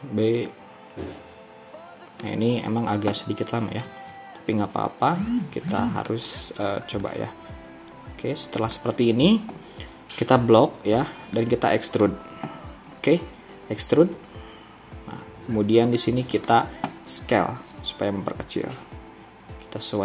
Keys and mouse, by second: 1.9-3.8 drag, 4.0 alt+a, 5.4 b, 8.4-10.6 drag, 10.6 b, 14.2 e, 17.8 s.